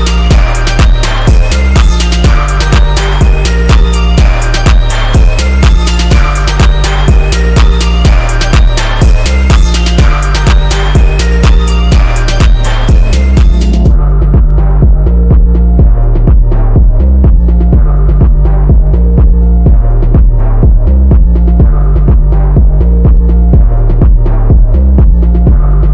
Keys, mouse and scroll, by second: 1.0 click, 2.2 ctrl+z, 3.3 click, 3.8 ctrl+z, 4.0 click, 5.5 click, 6.9 right click, 8.8 click, 9.1 right click, 10.0 click, 11.3 click, 12.0 click, 15.8 click, 19.5-25.9 drag.